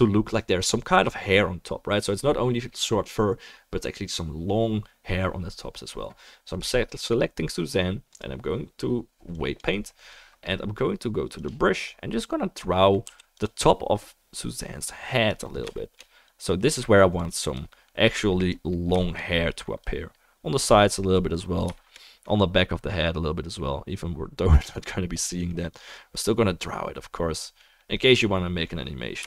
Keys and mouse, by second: 6.6-29.2 right drag, 8.2-13.4 drag, 12.6-29.2 middle drag, 13.4 f, 13.6-29.2 drag.